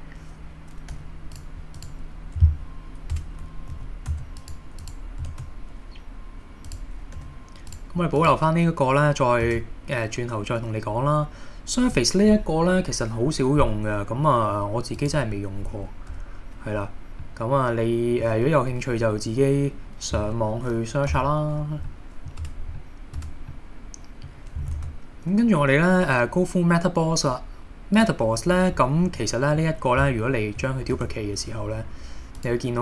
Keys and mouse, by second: 0.9 g, 1.3 click, 1.8 click, 3.1 Tab, 3.8 a, 4.1 x, 5.3 shift+a, 7.2 g, 7.7 click, 8.2 click, 9.5 shift+a, 17.2-18.3 middle drag, 18.8 KP_1, 21.1 super+z, 21.9-22.3 middle drag, 22.4 Tab, 22.8-23.1 middle drag, 23.2 Tab, 23.5-24.2 middle drag, 24.8 shift+a, 29.2-29.6 middle drag, 31.0 shift+d, 32.4 click.